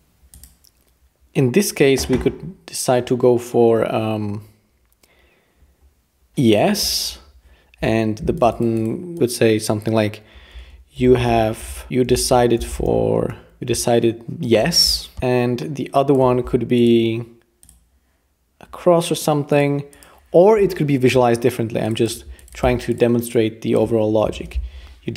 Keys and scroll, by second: 10.3-14.1 typing, 24.1-25.0 typing.